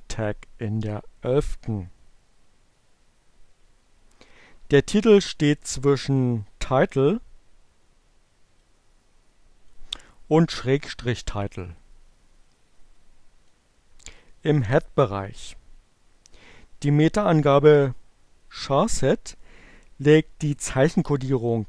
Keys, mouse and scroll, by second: 8.0-9.0 drag, 10.7-12.7 drag, 15.4 click.